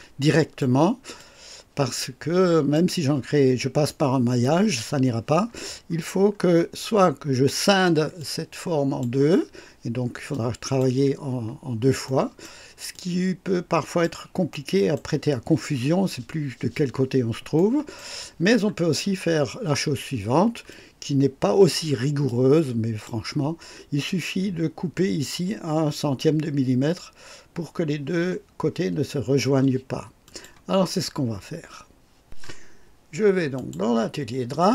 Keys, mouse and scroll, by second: 1.1-2.9 drag, 3.8-4.5 right drag, 5.6 scroll up 1, 6.3 scroll down 1, 8.1-9.1 drag, 10.2 click, 12.0 right click, 12.8-14.1 drag, 14.4 right click, 17.5 right click, 18.9-19.2 scroll up 1, 19.2 middle click, 20.0-20.3 scroll down 1, 20.6-21.8 drag, 22.2-23.2 drag, 30.2 click, 33.5 click, 34.5 click.